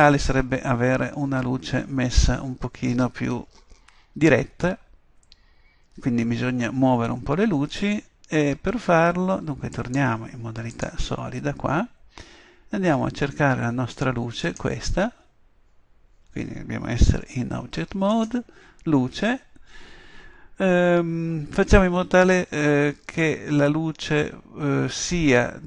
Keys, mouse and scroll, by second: 9.8-10.2 drag, 12.0-14.5 middle drag, 17.2 Tab, 18.2 right click.